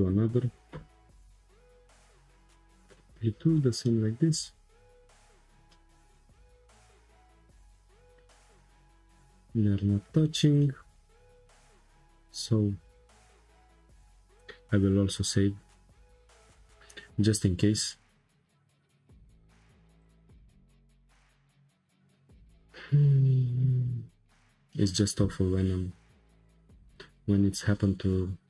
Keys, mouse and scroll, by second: 0.6 g, 2.2 shift+middle click, 2.4 click, 3.1 click, 3.5-5.2 shift+middle drag, 5.2-5.7 scroll up 6, 5.7-8.6 middle drag, 8.6-9.2 scroll down 7, 9.2-13.5 shift+middle drag, 14.0-17.0 drag, 20.0-23.2 drag.